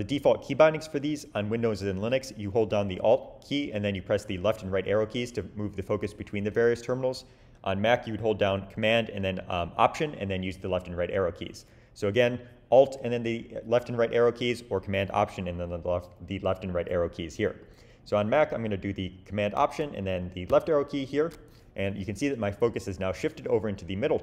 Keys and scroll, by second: 20.4 alt+super+Left.